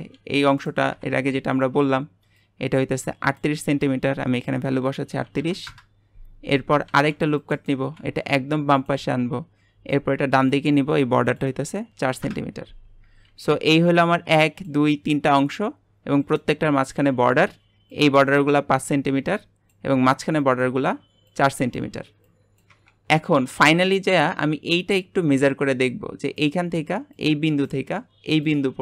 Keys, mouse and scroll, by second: 0.1 ctrl+r, 0.9 g, 2.4 click, 4.3-6.8 drag, 6.8 ctrl+r, 7.9 g, 9.9 click, 11.2-22.9 drag.